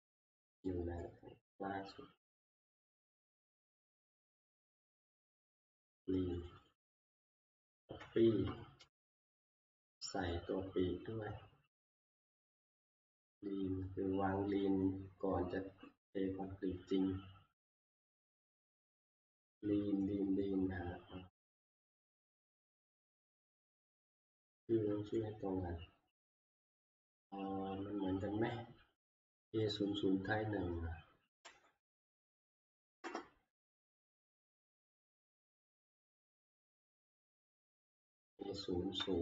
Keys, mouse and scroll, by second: 4.1 click, 4.7 scroll, 5.4-6.1 scroll, 6.5 click, 6.7 click, 7.4 ctrl+c, 8.0 Escape, 8.1 Escape, 9.6 click, 11.7-12.2 scroll, 12.7-13.1 scroll, 14.2-14.6 scroll, 14.7-16.2 scroll up 5, 16.2-16.8 scroll up 2, 17.2-17.8 scroll up 1, 18.4 scroll down 1, 19.1 scroll down 1, 19.9 scroll down 1, 20.2 middle click, 22.0 click, 22.5 middle click, 22.6 middle click, 23.9 click, 24.1 click, 25.2 scroll, 31.4 ctrl+v, 33.0 Return, 36.9 click, 38.4 click.